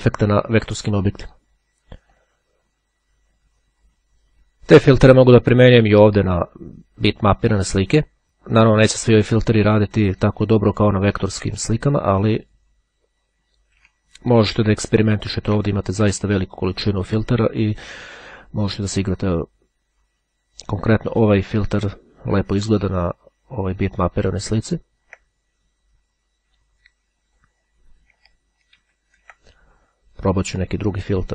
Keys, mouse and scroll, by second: 2.1 click, 3.1-4.7 drag, 5.3 click, 7.3 click, 12.2 click, 14.7-15.3 ctrl+scroll up 2, 28.3 ctrl+z, 30.4 click.